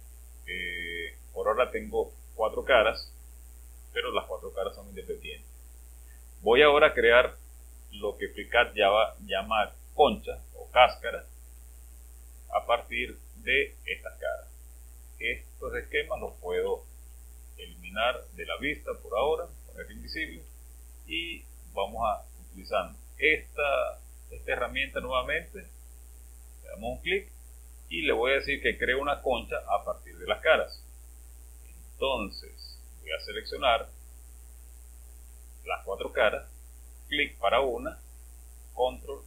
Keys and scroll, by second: 16.9 space.